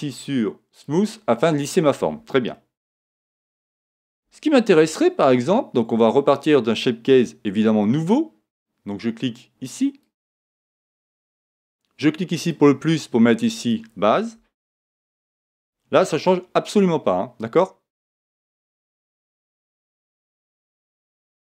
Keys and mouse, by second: 2.5-4.3 middle drag, 4.9-7.1 middle drag, 7.1 Tab, 10.0 click, 12.3-15.5 drag.